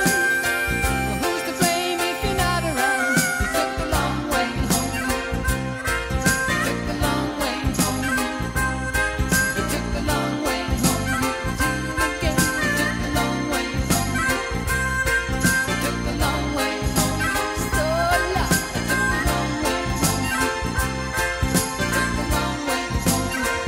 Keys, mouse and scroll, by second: 2.0-2.7 middle drag, 2.7-3.1 right drag, 3.1-3.9 middle drag, 3.9-5.1 right drag, 5.1 middle click, 5.2-9.1 right drag, 6.8 Tab, 9.1-10.5 middle drag, 17.0-18.1 middle drag, 21.4 e.